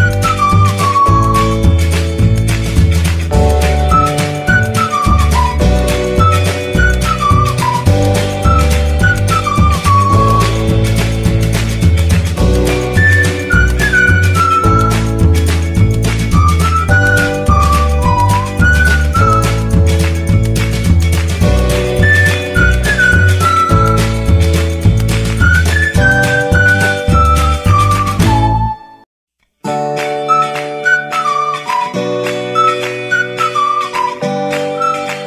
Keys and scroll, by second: 3.5 a, 8.0 1, 10.2-11.2 typing, 15.4 1, 22.6 0, 24.4 g, 24.6 y, 25.1 F12, 26.1 Escape, 27.7 F12, 29.1 Escape, 31.9 3, 32.3 F12, 33.9 Escape.